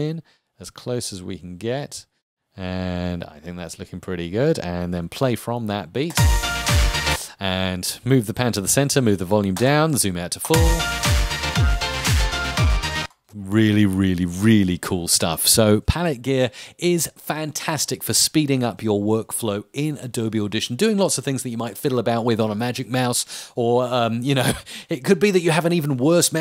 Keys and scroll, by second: 6.7 space, 10.3 space, 12.9 space.